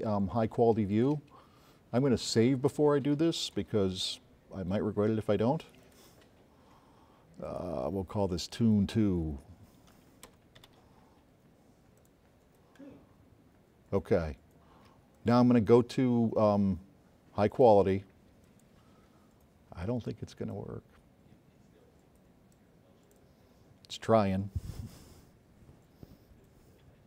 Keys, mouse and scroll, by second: 2.9 click, 4.2 click, 5.4 click, 7.8 click, 9.4 click, 12.4 BackSpace, 13.9 click, 17.2 click, 20.5 click, 24.6-25.2 drag.